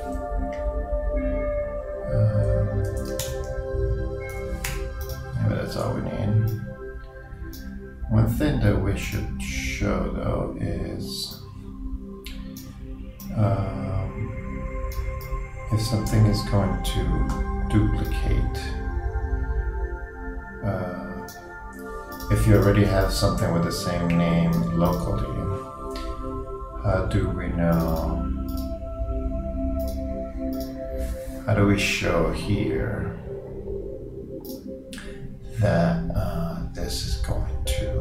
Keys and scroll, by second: 3.1 shift+Return, 3.3 shift+t, 4.3 shift+BackSpace.